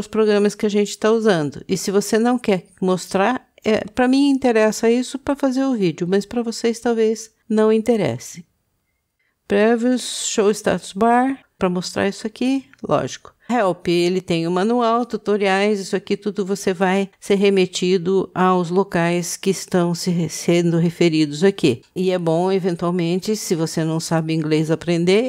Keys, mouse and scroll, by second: 3.5 click.